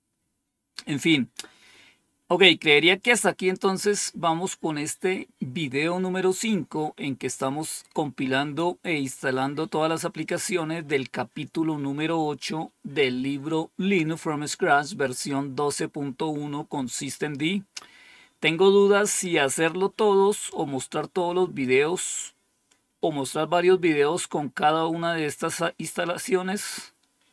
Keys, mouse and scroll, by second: 17.8-18.5 scroll up 1, 19.0-19.7 scroll up 2.